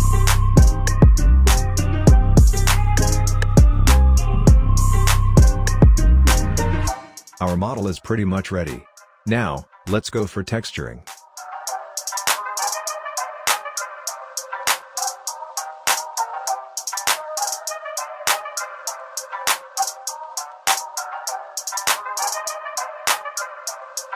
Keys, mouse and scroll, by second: 0.1-1.6 right drag, 1.6 click, 2.5 5, 2.9-3.3 scroll down 1, 3.4-5.1 alt+drag, 5.9-10.4 alt+drag, 10.4-15.8 alt+drag, 19.4-19.9 scroll down 1, 20.5-22.4 alt+middle drag, 22.4 click.